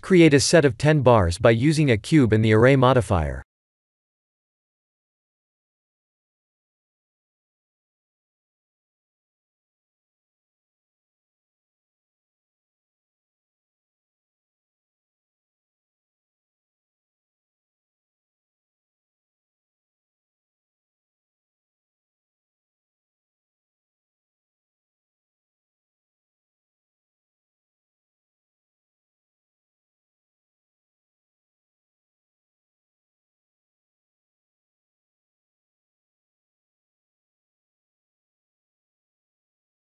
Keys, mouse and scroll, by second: 0.1 shift+a, 2.4 s, 4.9 KP_1, 5.3 KP_0, 5.7 KP_Decimal, 6.5-6.9 scroll down 8, 7.2 middle click, 8.2 KP_7, 9.1 s, 13.5-14.8 scroll down 14, 14.8 shift+middle click, 16.0 g, 18.1-18.9 scroll up 10, 19.1 shift+middle click, 20.0 s, 24.0-25.7 scroll down 10, 25.7-26.7 scroll down 1, 26.7 click, 28.4 middle click, 29.0 middle click, 29.7 g, 32.3 s, 36.9 KP_1, 37.8 scroll up 2, 38.3 g.